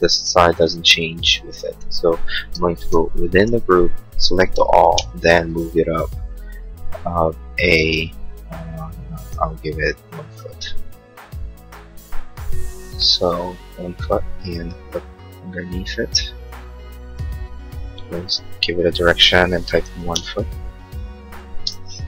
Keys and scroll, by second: 2.1 Escape, 2.4 space, 3.5 ctrl+a, 4.9 m, 10.0 1, 10.3 Return, 16.3 p, 19.9 ', 20.1 Return, 21.5 space, 21.8 Escape.